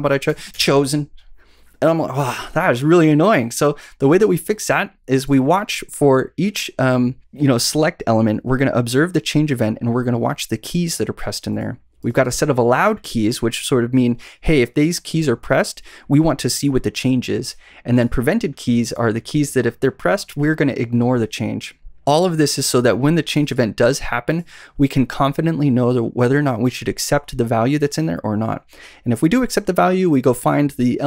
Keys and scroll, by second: 0.2 Up, 0.4 Return.